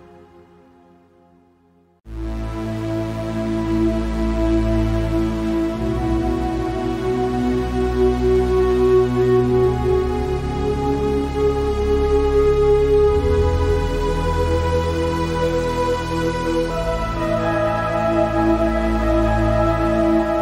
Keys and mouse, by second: 1.7 click, 4.1 click, 4.9 shift+click, 5.9 click, 6.9 click, 8.1 click, 11.0 click, 14.4 click, 15.5 click, 19.7 click.